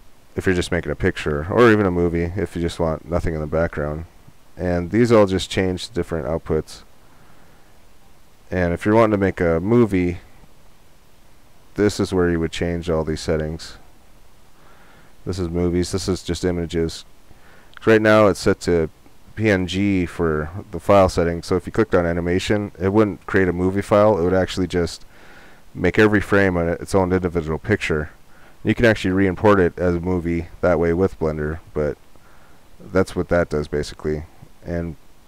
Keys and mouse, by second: 3.7-6.1 drag, 9.9-11.9 drag, 34.6-35.2 drag.